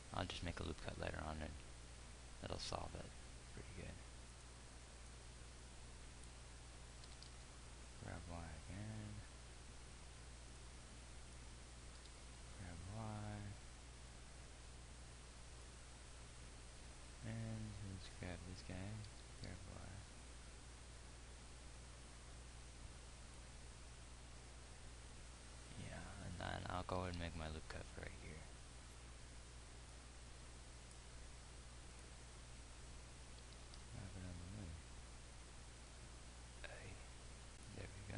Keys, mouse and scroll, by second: 0.6 g, 7.6 g, 12.5 g, 19.7 g, 27.5 ctrl+r, 34.0 g.